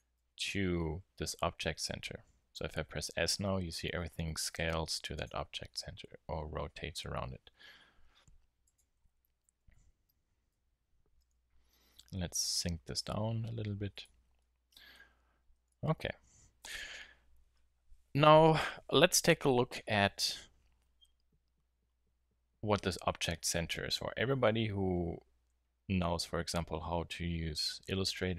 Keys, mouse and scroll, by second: 0.1 Tab, 2.4 s, 5.2-5.6 drag, 5.9 r, 7.1-8.1 middle drag, 8.7-10.4 drag, 9.0 Tab, 9.4 z, 9.7 z, 10.5 Tab, 11.6 g, 14.6-15.0 middle drag, 16.0 g, 16.7 click, 18.4 click.